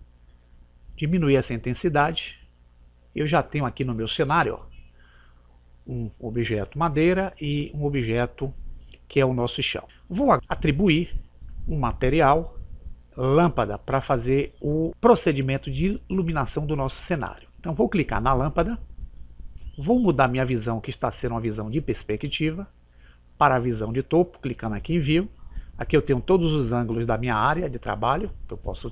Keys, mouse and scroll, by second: 0.4 click, 4.4-6.5 middle drag, 18.9-20.7 right drag.